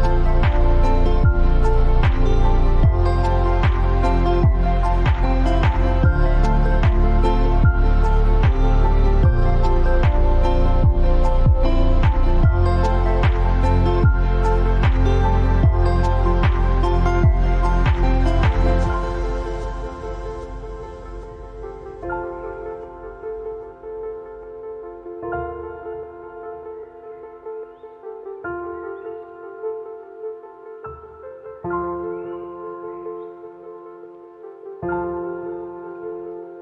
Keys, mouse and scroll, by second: 0.1 click, 1.7-2.0 scroll down 1, 3.1-8.3 drag, 8.3 ctrl+t, 9.3-15.5 shift+drag, 17.0-19.0 alt+drag, 19.0 Down, 20.2 t, 20.6 click, 21.5-24.2 typing, 25.1-33.7 drag, 33.7 ctrl+t, 34.6-36.6 shift+drag.